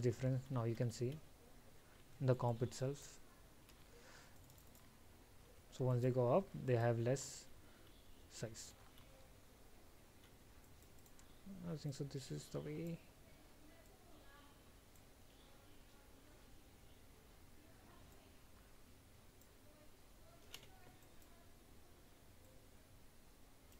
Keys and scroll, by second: 5.8 alt+?, 16.0 ctrl+z.